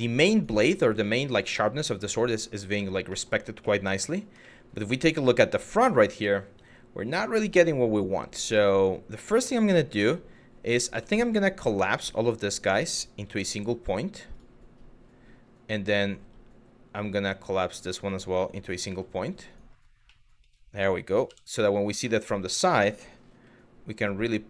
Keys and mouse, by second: 0.0 drag, 0.8 middle drag, 1.1 Tab, 1.5 middle click, 2.5 shift+middle click, 2.7 middle click, 3.3 middle click, 4.0 middle click, 7.0 Tab, 8.2 Tab, 8.9 middle click, 9.4 shift+middle click, 10.9 shift+click, 12.3 shift+click, 13.1 m, 16.6 click, 17.6 shift+click, 18.5 m, 19.8 middle click, 20.9 KP_3, 21.7 middle click, 22.9 g.